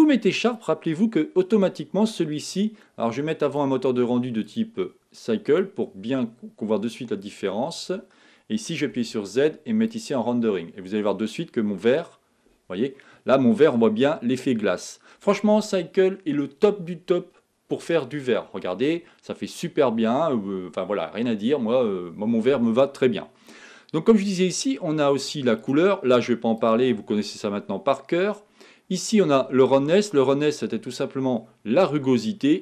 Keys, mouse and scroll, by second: 1.9-10.0 drag, 10.0 z, 12.3-12.7 scroll up 3, 25.6 click.